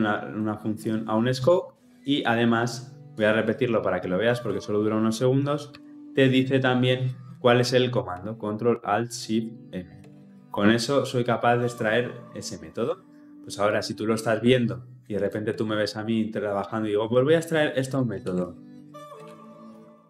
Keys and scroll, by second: 5.5 ctrl+alt+shift+m, 18.1 ctrl+alt+shift+m.